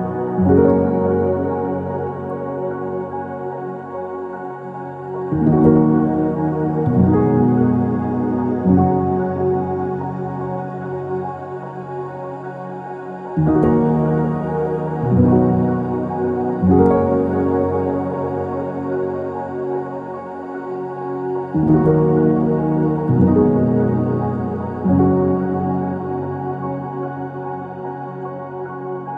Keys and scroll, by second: 1.7-2.7 typing, 3.8 ctrl+z, 4.4-5.2 typing, 7.9 BackSpace, 9.5-10.4 typing, 14.6 BackSpace, 24.9 typing, 25.0 Return, 26.4 Escape, 26.9-28.7 typing, 28.8 Escape.